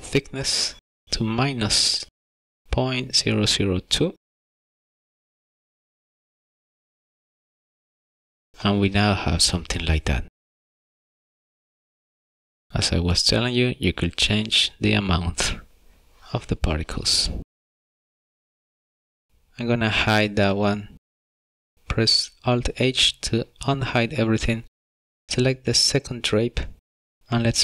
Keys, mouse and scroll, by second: 1.4 click, 4.7 KP_0, 8.7 scroll down 3, 9.3 middle click, 10.5-10.8 scroll down 2, 11.1 middle click, 12.1-12.7 scroll up 6, 12.8 scroll down 2, 12.9 shift+middle click, 13.6-14.3 scroll up 3, 14.6 middle click, 17.8 click, 17.9 click, 18.1 KP_0, 18.5 scroll down 8, 18.8 shift+middle click, 20.2 click, 25.0 alt+h, 25.9 click, 27.2 shift+middle click.